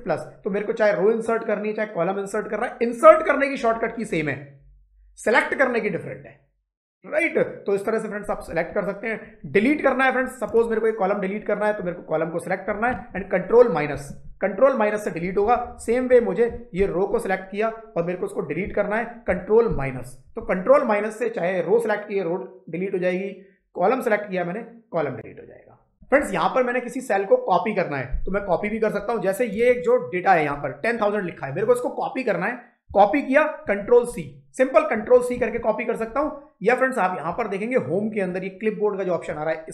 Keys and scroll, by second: 13.8 ctrl+-, 15.3 Down, 16.6 shift+space, 19.5 ctrl+-, 33.5 ctrl+c.